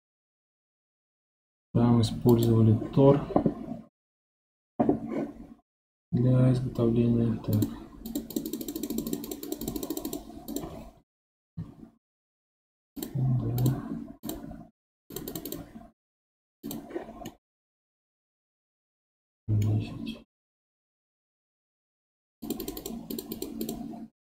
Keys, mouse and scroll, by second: 7.5 Left, 7.5-17.3 drag, 8.0 Left, 8.3 Left, 8.4 Left, 9.1 Left, 9.2-9.7 Left, 9.9 Left, 10.0 Left, 17.3-20.3 middle drag, 22.4-24.2 drag.